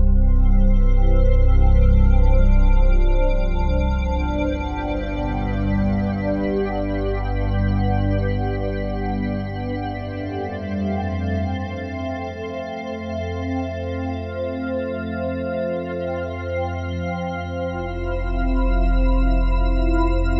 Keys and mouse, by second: 0.3 shift+d, 0.6 z, 1.7 click, 2.4 r, 2.8 z, 3.9 click, 4.4 click, 5.3 shift+d, 5.6 z, 6.8-8.4 alt+drag, 6.8 typing, 8.4 typing, 9.1-10.8 ctrl+alt+drag, 10.8 typing, 12.2-13.9 drag, 13.9 typing, 14.7-16.1 drag, 16.1 typing, 17.5 typing, 18.3-20.0 drag, 20.0 typing.